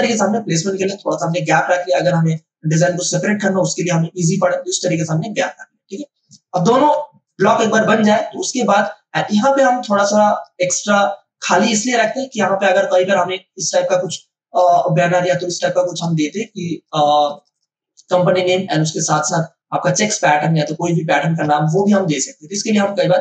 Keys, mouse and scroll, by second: 0.9 space, 1.2-6.7 ctrl+drag, 6.7 ctrl+space, 7.2 ctrl+alt+click, 9.5 space, 10.0 click, 10.0 space, 14.0 click, 14.7 space, 15.7 click, 16.1 space, 16.4 click, 16.6 space, 17.2-23.2 ctrl+drag.